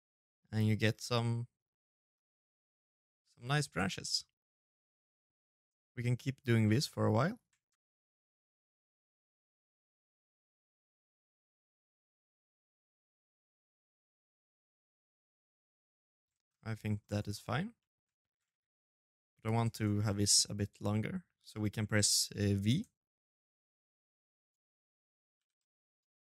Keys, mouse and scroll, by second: 0.9 scroll up 4, 1.0 middle click, 2.0 shift+z, 2.2-2.9 scroll up 3, 2.3 middle click, 2.9 middle click, 3.8 shift+z, 4.2 right click, 4.5 shift+z, 4.6 middle click, 5.0 e, 6.0 shift+z, 6.5 ctrl+a, 8.2 middle click, 8.5 ctrl+a, 8.9 middle click, 9.1 e, 9.6 ctrl+a, 9.8 middle click, 10.4 middle click, 10.7 shift+right click, 10.8-13.4 typing, 11.1 middle click, 12.0 middle click, 12.3 right click, 12.8 middle click, 13.4 right click, 13.8 middle click, 14.1 scroll down 4, 14.3 scroll up 1, 14.3 middle click, 14.9 right click, 15.1 ctrl+a, 15.4 middle click, 15.6 shift+z, 15.9-16.5 scroll down 2, 16.0 right click, 16.5 middle click, 16.9 shift+z, 17.2 middle click, 18.2 middle click, 18.4 shift+z, 21.4 v, 24.1 l, 24.3 middle click, 24.9 g, 25.4 middle click, 26.1 right click.